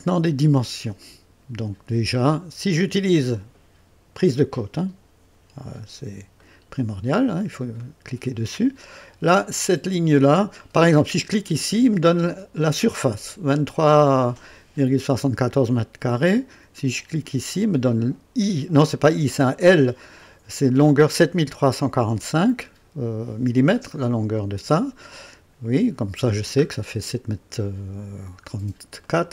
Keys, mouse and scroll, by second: 0.6-1.5 right drag, 4.2 click, 5.8 scroll up 2, 6.4-7.1 right drag, 7.2 scroll up 2, 7.8-8.5 right drag, 11.5 click, 17.2 click, 25.4-25.8 scroll up 2, 26.2-26.6 scroll down 2, 27.8-28.5 scroll up 1, 28.5-28.8 scroll up 1, 29.0-29.3 right drag.